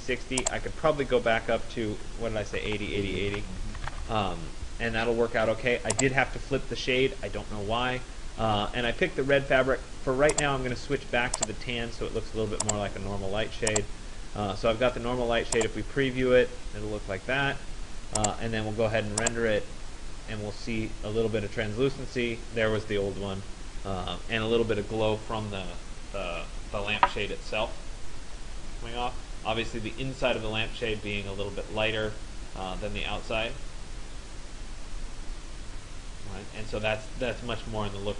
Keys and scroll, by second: 2.3-4.0 typing.